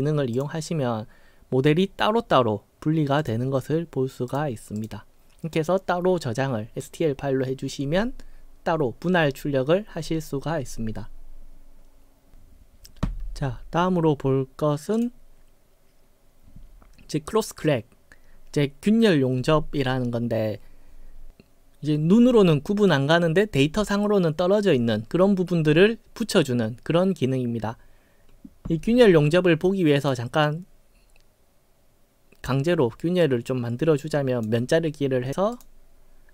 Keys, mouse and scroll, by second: 0.4 click, 3.2 click, 4.3 click, 4.8 click, 15.0 click, 30.0 click, 33.2-34.4 drag, 35.6 click.